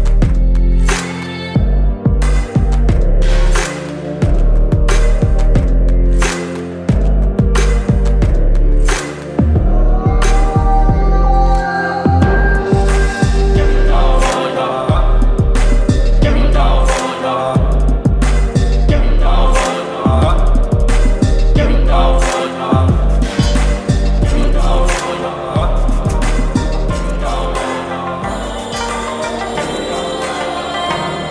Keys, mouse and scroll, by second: 2.3 Down, 2.7 ctrl+click, 4.0 click, 7.9 ctrl+click, 14.0-17.4 drag, 15.6-15.9 click, 17.2-18.0 typing, 18.6 Return, 26.5 click, 27.1-30.5 drag.